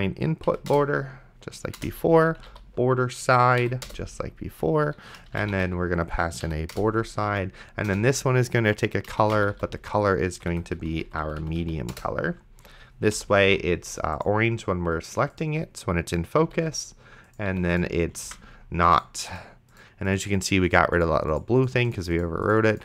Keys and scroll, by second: 0.5 Down, 0.7 Return, 2.2-3.0 typing, 3.6 Down, 3.9 Return, 5.2-6.0 typing, 6.5 Down, 6.7 Return, 7.3 c, 7.9 Return, 9.4 p, 10.3 Left, 10.8 Down, 11.9 Return, 13.2 ,, 13.7 ctrl+s, 16.4 ,, 18.5 ctrl+s.